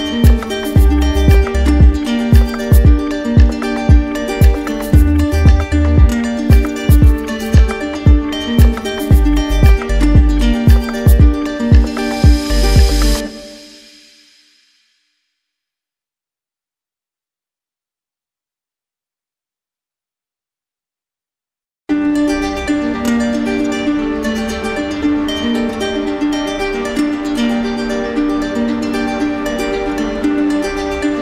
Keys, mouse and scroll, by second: 0.5 ctrl+click, 1.3 alt+right click, 2.2 alt+right click, 7.1 ctrl+click, 8.7 ctrl+click, 9.2 ctrl+click, 9.7 ctrl+click, 11.1 ctrl+click, 12.7 ctrl+click, 15.6 ctrl+click, 18.3 click, 20.6 click, 22.8 click, 24.6 click, 26.0 click, 29.7 ctrl+click, 30.7 ctrl+click.